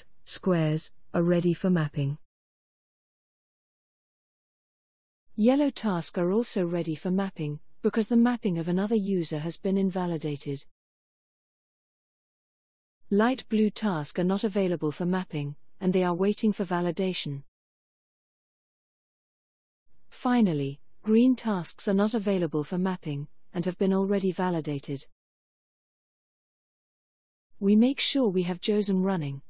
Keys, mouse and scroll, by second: 24.1 click.